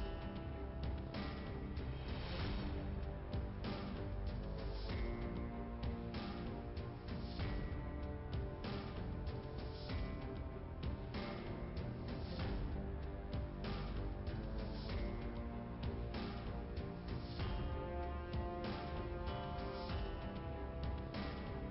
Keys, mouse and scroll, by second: 0.5 shift+Return, 0.8 shift+Return, 1.2 scroll down 1, 2.3 click, 4.6 click, 4.7 click, 6.1 click, 7.7 click, 9.8 click, 9.9 click, 11.2 click, 14.0 click, 15.6 click, 21.1 shift+Return.